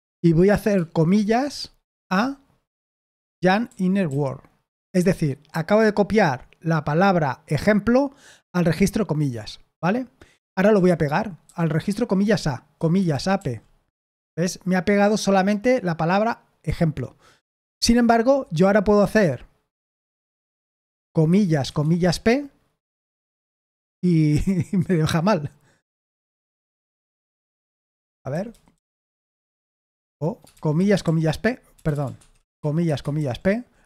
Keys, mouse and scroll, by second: 1.6-4.5 typing, 10.6 j, 11.4 j, 12.8-13.8 typing, 20.2-22.5 typing, 25.9-28.7 typing, 29.7-33.6 typing, 32.1 Escape.